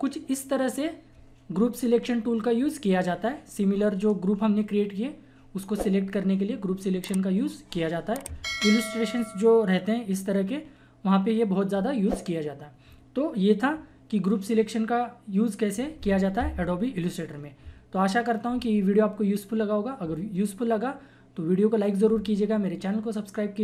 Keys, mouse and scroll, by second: 1.8 typing.